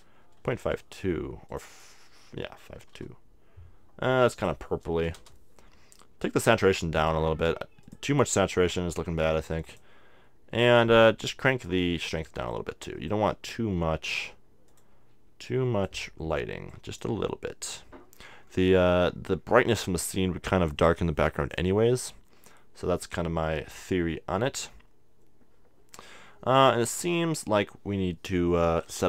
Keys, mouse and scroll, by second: 1.5-3.3 drag, 4.2-6.0 drag, 6.6-13.4 drag, 10.7-14.7 middle drag, 14.7-18.6 drag, 18.4-20.3 middle drag, 20.3-21.7 scroll down 1, 21.7-23.5 scroll down 1, 23.5 scroll down 1.